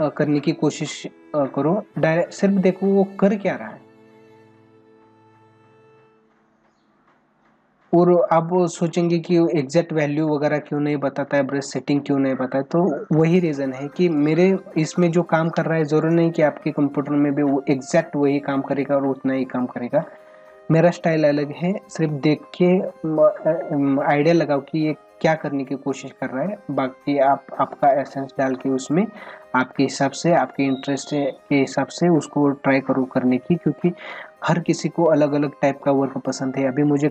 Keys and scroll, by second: 14.9 space, 21.1 space.